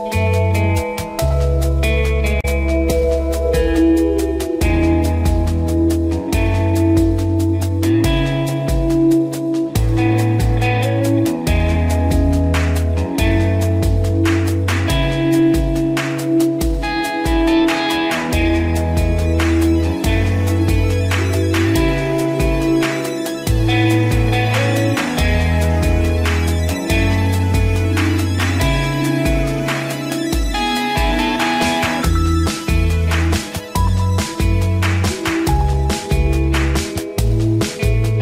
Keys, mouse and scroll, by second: 15.6 Down, 16.2 Right, 17.8 Down, 18.5 Right, 19.7 Page_Down, 22.3 Page_Down, 23.5 Page_Up, 25.2 click, 25.8 scroll up 1, 29.5 scroll up 1, 29.8 ctrl+=, 31.0 scroll down 1, 31.9-33.3 drag, 33.4 scroll up 1, 34.8 ctrl+-, 36.0 ctrl+scroll up 1.